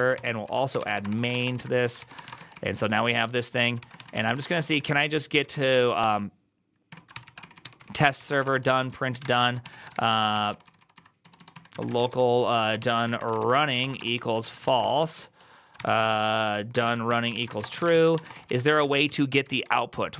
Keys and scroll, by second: 0.0-20.1 typing, 6.8 Tab, 7.0 ctrl+c.